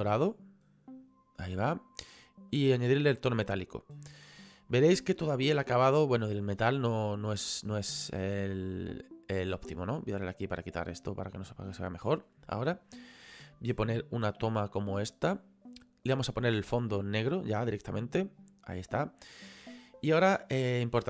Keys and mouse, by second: 2.5 click, 4.7 middle click, 6.3 shift+middle click, 10.1 click, 11.5 middle click, 13.8 click, 16.1 click.